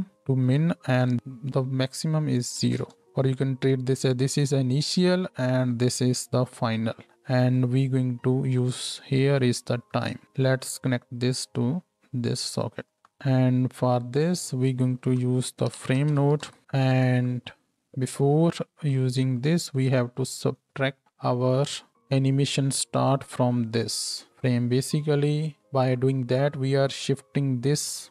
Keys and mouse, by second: 17.1-19.4 drag, 19.4-23.0 middle drag, 23.0-28.1 ctrl+drag, 23.8 ctrl+h.